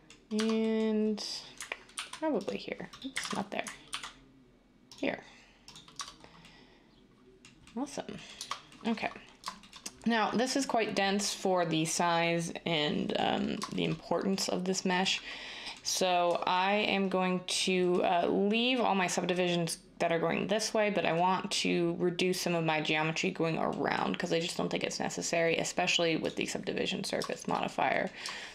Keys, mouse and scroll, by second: 0.3 Tab, 1.9 ctrl+r, 3.2 ctrl+z, 3.9 ctrl+r, 5.9 Tab, 8.4 Tab.